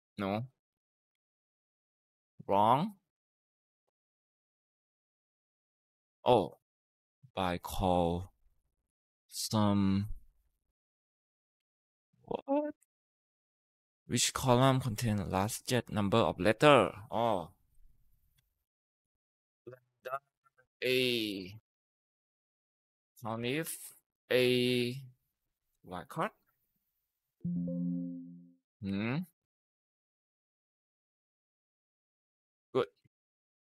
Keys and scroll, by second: 0.2 Return, 0.6 Up, 0.9 Left, 1.0 typing, 1.2 Left, 1.5 Left, 10.2 Escape, 18.5-26.0 typing, 20.1 Tab, 27.1-27.8 typing, 27.9 Return, 28.4 Left, 28.5 Left, 28.7 Left, 28.8 Left, 29.0 Left, 29.2 Left, 30.6-31.4 typing, 31.8 Tab, 32.5 Left, 32.8 Right.